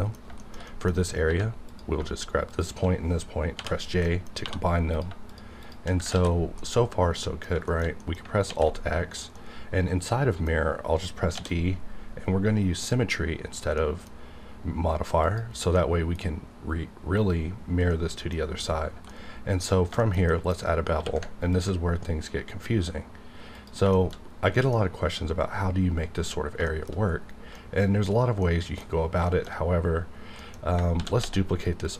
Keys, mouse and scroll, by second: 0.4 shift+middle click, 1.0 scroll up 1, 1.3 1, 1.6 click, 1.7 click, 2.5 shift+click, 3.5 j, 4.0 middle click, 4.4 2, 4.9 click, 6.1 ctrl+x, 6.3-6.6 ctrl+scroll down 2, 6.9 middle click, 7.7 shift+middle click, 8.4 alt+x, 9.4-11.3 middle drag, 11.3 d, 12.7 click, 13.9 middle click, 14.0-15.2 scroll down 1, 16.1-19.0 middle drag, 19.1 middle click, 19.7 scroll up 2, 20.0 shift+middle click, 20.6 scroll up 1, 20.9 q, 21.5 ctrl+click, 23.5 click, 23.9 shift+middle click, 24.1-24.5 shift+scroll up 1, 24.5 shift+middle click, 26.4 shift+scroll down 1, 26.6 shift+middle click, 27.2 scroll down 1, 27.6-29.4 middle drag, 29.4 shift+middle click, 29.5-30.0 shift+scroll up 1, 30.0-30.5 scroll down 2, 31.0 shift+d, 31.2 x, 31.8 click.